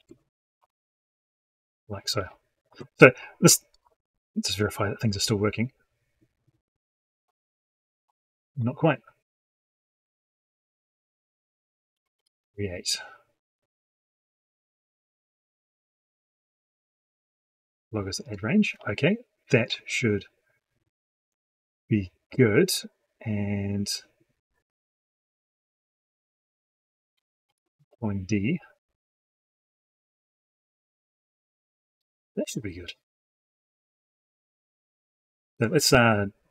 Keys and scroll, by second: 12.0 ctrl+shift+Down, 27.3 ctrl+shift+Down.